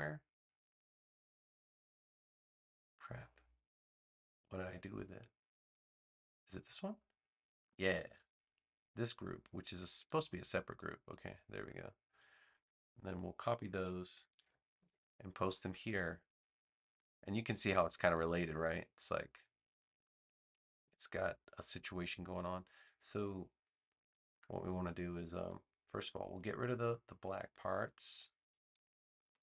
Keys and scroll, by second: 14.2 super+c, 14.7 super+v.